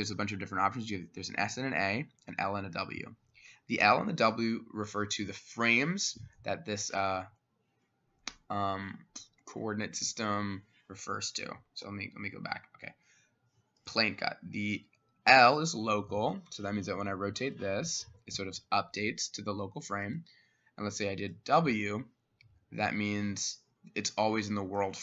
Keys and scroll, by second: 11.9 Escape.